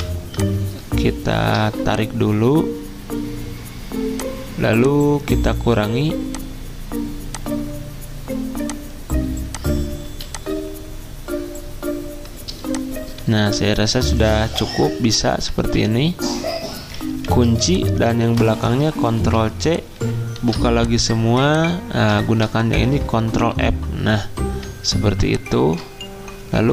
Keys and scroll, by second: 0.0-0.3 typing, 10.0 z, 12.6 c, 14.7 v, 15.6 ctrl+z, 17.3 ctrl+2, 18.2 ctrl+z, 19.2 ctrl+c, 20.4 ctrl+alt+2, 22.2 ctrl+z, 23.3 f.